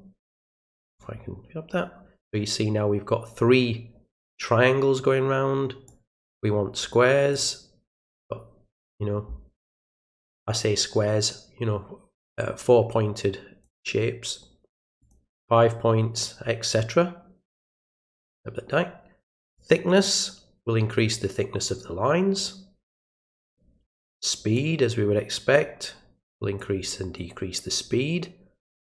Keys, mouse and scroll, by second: 0.5 click, 5.9 click, 7.3 click, 13.6-14.7 drag, 15.0 click, 17.5-18.0 drag, 19.5-21.1 drag, 24.6-25.5 drag, 26.6-28.9 drag.